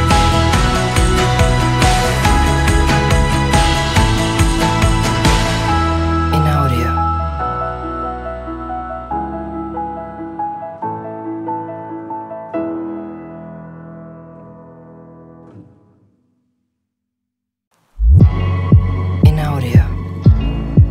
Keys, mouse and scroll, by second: 0.0 middle click, 0.3 shift+a, 2.4 middle click, 2.5 g, 3.1 click, 3.2-3.6 middle drag, 3.7 g, 3.8 z, 4.2 click, 4.5 middle drag, 4.6 click, 4.6 right click, 5.2 shift+t, 5.6 shift+click, 6.1 drag, 6.4 drag, 7.0 shift+click, 7.6 shift+click, 8.1-8.4 middle drag, 8.6 r, 9.0 click, 9.4 shift+t, 9.9 shift+click, 10.0 shift+click, 10.1-10.5 middle drag, 10.1-10.5 drag, 10.9 click, 12.7 shift+d, 13.1 shift+click, 13.2 drag, 13.9 g, 15.0 click, 15.5-15.8 drag, 16.0 g, 16.1 z, 16.5 click, 17.6 shift+t, 17.7 shift+click, 17.8-18.2 middle drag, 18.8 g, 18.9 z, 19.2 click, 20.3 shift+t.